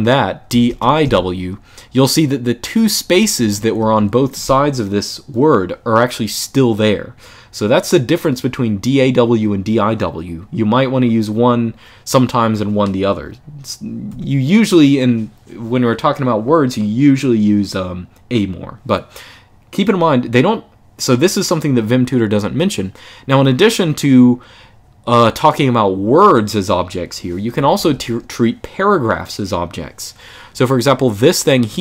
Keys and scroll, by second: 0.0-1.3 typing, 2.7-4.3 typing, 13.8 u, 27.3 k, 27.5 k, 27.6 k.